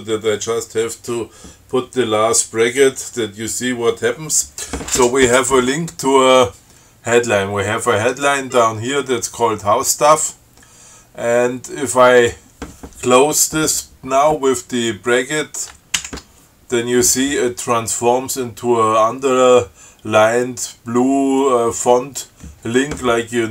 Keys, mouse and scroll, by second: 8.6-8.9 scroll down 2, 9.2 scroll up 2, 10.6 scroll up 2, 12.4 click, 16.2 alt+9.